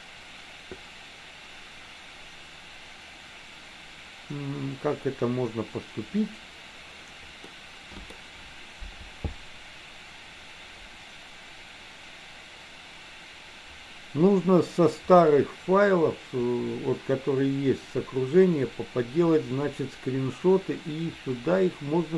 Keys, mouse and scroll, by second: 7.6 middle click.